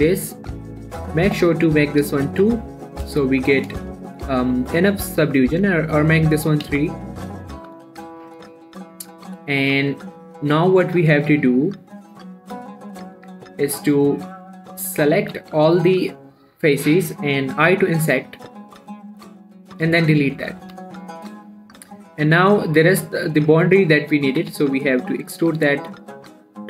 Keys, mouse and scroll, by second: 1.0-2.9 drag, 3.1 shift+middle click, 3.3-4.1 shift+scroll up 5, 3.6 shift+middle click, 4.5-5.1 shift+scroll up 2, 5.9 click, 7.0 scroll down 1, 7.1 z, 7.6 scroll down 1, 8.0 z, 8.2 scroll down 2, 8.3 shift+middle click, 9.2 scroll down 1, 9.4 Tab, 9.6-13.6 middle drag, 13.6 Tab, 14.7 click, 15.6 a, 18.1 typing, 20.0 click, 20.3 x, 20.8 middle click, 21.0 a, 21.3 middle click, 21.8 scroll up 1, 22.8 middle click, 24.7 e, 24.9 z.